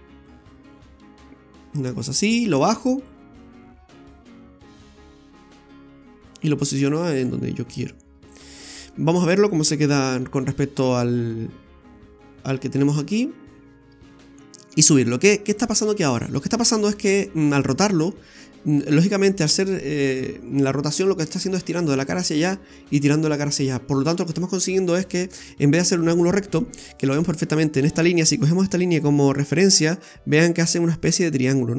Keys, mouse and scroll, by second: 3.1 click, 8.3 click, 8.6 scroll down 2, 8.9 middle click, 9.8 KP_1, 15.6 click, 26.8-28.3 scroll up 5, 29.1-30.4 scroll down 3.